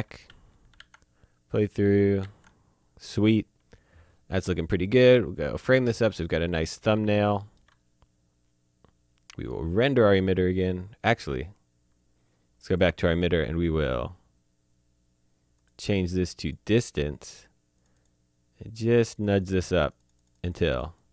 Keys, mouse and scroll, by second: 0.8 a, 5.1 middle click, 5.6-6.0 scroll up 2, 6.0 shift+middle click, 12.7 click, 15.5 click.